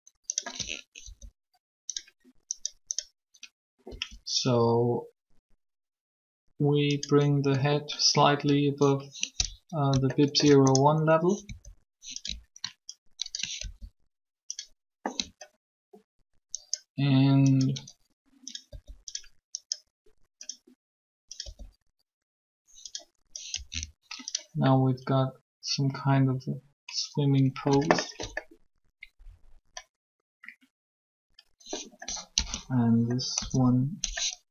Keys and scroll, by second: 1.0 shift+r, 3.9 r, 11.4 alt+shift+r, 13.6 ctrl+r, 18.7 r, 21.3 r, 32.2 1, 33.2 3.